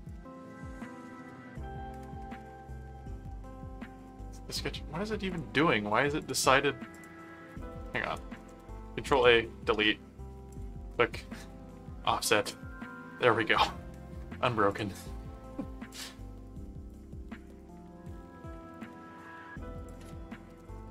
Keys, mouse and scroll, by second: 2.0 click, 2.6 ctrl+a, 3.9 click, 5.2 click, 5.9 click, 6.9 click, 7.5 click, 8.4 ctrl+a, 10.5 click, 11.1 right click, 14.7 click, 15.9 click, 16.8 click, 17.4 right click, 18.7 click, 19.7 click, 20.5 ctrl+click.